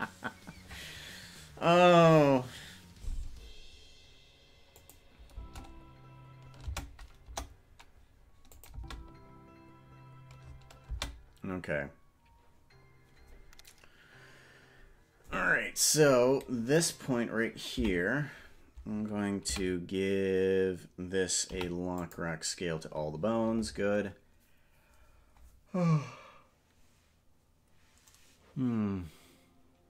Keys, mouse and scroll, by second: 4.9 click, 5.4 space, 6.8 space, 7.4 KP_0, 8.7-11.1 drag, 8.8 space, 11.0 space, 16.9 click, 18.0 Left, 19.6 a, 21.6 i.